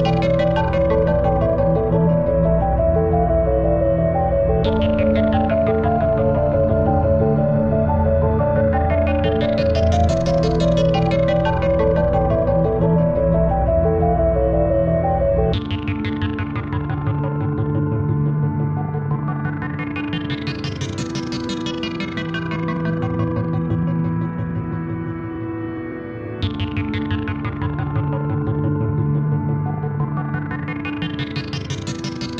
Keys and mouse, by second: 0.3 click, 0.5 space, 0.8 click, 1.0 space, 1.8 click, 3.1 click, 4.3 space, 4.5 click, 4.7 space, 5.5 click, 5.9 space, 6.3-7.7 drag, 7.7 space, 7.9 click, 8.3 space, 9.1-11.0 drag, 11.0-12.7 alt+shift+drag, 12.7-15.3 drag, 15.3 click, 15.9 click, 19.1-21.8 shift+drag, 21.8-23.4 drag, 23.6-25.8 alt+drag, 28.4-30.3 drag, 31.5 click.